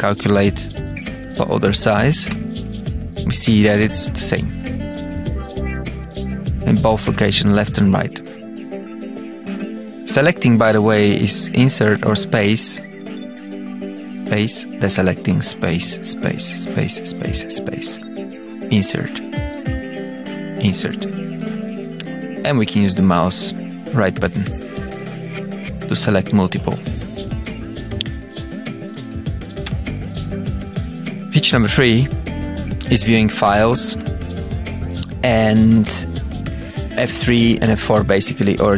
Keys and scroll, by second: 0.7 space, 1.4 Tab, 1.9 Down, 2.2 space, 4.3 Tab, 4.8 space, 6.6 space, 7.5 Tab, 8.3 space, 8.8 Tab, 9.0 space, 9.8 Up, 12.2 space, 12.4 Down, 14.2 Up, 15.2 space, 15.4 Down, 15.7 space, 16.2 Down, 16.3 space, 16.7 Down, 17.5 Up, 18.6 Insert, 19.6 Up, 20.5 Insert, 21.3 Up, 28.3 Up, 29.3 Up, 29.6 Return, 30.3 Tab, 30.8 Return, 33.8 Tab, 34.2 Down.